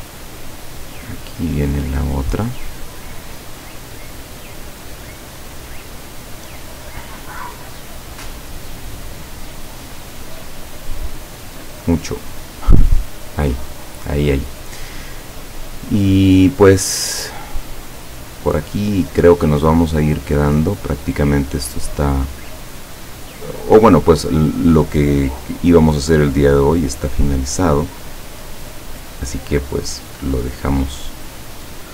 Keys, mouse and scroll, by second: 0.9 click, 2.9 click, 3.6 click, 4.5 click, 5.7 click, 6.0 click, 7.5 click, 8.0 click, 8.5 click, 8.9 click, 9.3 click, 10.9 click, 11.3 click, 12.4 click, 13.0 click, 15.5 click, 18.5 click, 19.3 click, 20.0 click, 21.6 click, 22.3 click, 23.5 click, 25.9 click, 26.7 click, 27.5 click, 29.5 click, 31.6 click.